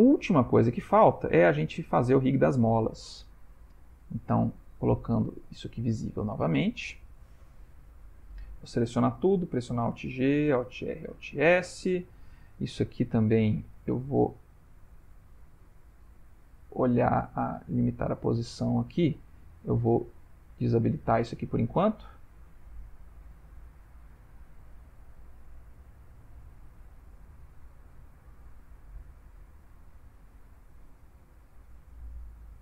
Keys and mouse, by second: 0.0 ctrl+middle click, 0.5 middle click, 1.3 middle click, 1.8 shift+middle click, 3.9 shift+click, 4.8 ctrl+middle click, 5.4 middle click, 7.3 ctrl+middle click, 8.0 a, 8.7 ctrl+middle click, 8.9 ctrl+middle click, 10.1 alt+g, 10.5 alt+r, 11.1 alt+s, 11.9 click, 13.9 click, 16.7 click, 17.4 click, 20.4 click, 22.0 click, 22.6 click, 24.4 click, 25.0 middle click.